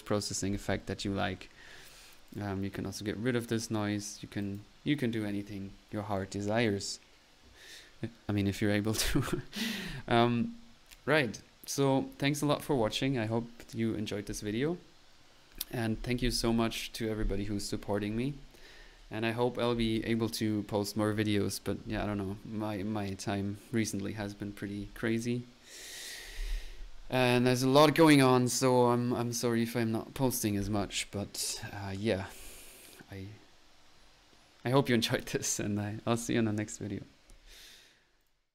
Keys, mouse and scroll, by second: 1.7 middle click, 2.3 click, 3.5 click, 4.4 click, 5.9-6.7 typing, 10.6 middle click, 10.9 click, 35.7-36.5 typing, 38.1-38.5 typing.